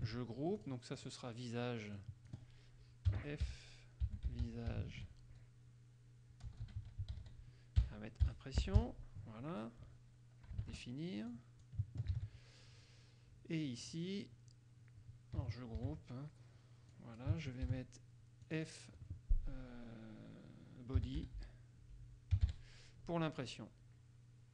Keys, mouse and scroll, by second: 0.2 ctrl+g, 0.8 ctrl+click, 1.1 ctrl+click, 2.1 click, 3.2-5.5 typing, 6.6-9.4 typing, 10.8 ctrl+Return, 11.4 click, 12.3 ctrl+c, 14.0 click, 16.0 ctrl+g, 17.1 click, 17.9 ctrl+v, 18.6 click, 20.9-23.1 typing.